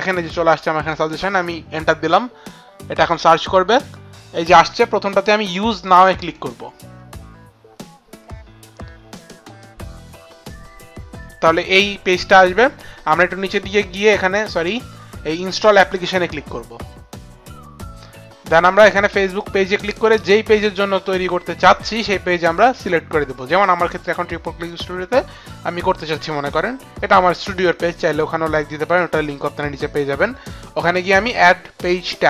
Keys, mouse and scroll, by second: 0.1 Down, 0.4 Down, 1.1 Return, 3.1 Return, 3.1 Down, 6.2 click, 14.7 click, 15.6 click, 19.3 click, 23.5 click, 24.7 click.